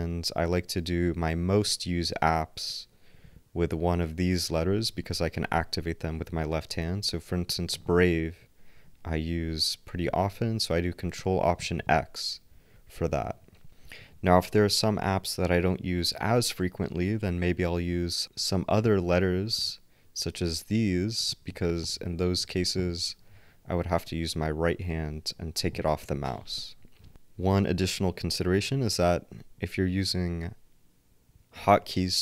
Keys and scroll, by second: 12.8 ctrl+alt+x, 13.1 ctrl+alt+x, 28.7 ctrl+alt+Up.